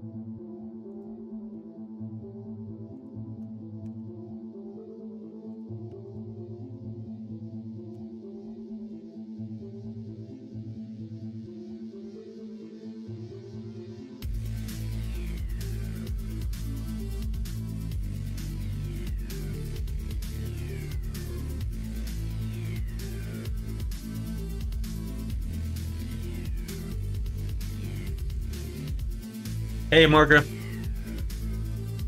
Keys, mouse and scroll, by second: 3.8 g, 6.0 alt+click, 7.9 x, 9.5 middle click, 10.1 Tab, 10.7 middle click, 11.1 click, 11.5-16.7 middle drag, 17.4 KP_1, 17.6 KP_3, 17.9 alt+z, 19.0 alt+z, 19.8 click, 20.1 Tab, 21.3 alt+click, 22.5 r, 30.9 shift+middle click.